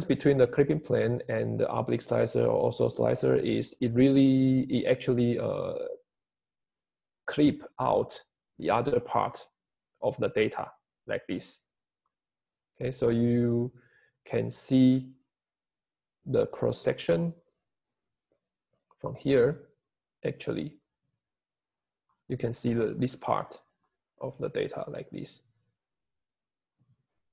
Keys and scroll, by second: 3.5 Home, 5.6 Home, 7.7 Escape.